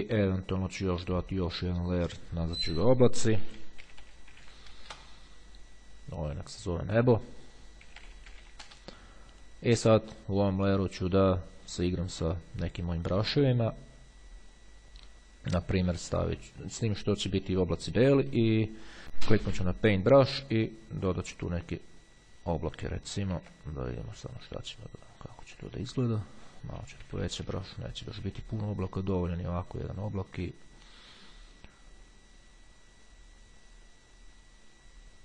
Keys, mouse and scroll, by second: 2.8-5.0 typing, 6.8 click, 7.3-9.2 typing, 10.1 click, 13.0 click, 13.9-15.2 scroll down 2, 15.2 scroll down 1, 17.5 click, 19.3-20.3 drag, 20.5 click, 21.6 click, 23.6 ctrl+z, 25.5 click, 27.3 ], 28.4 ], 29.1 click.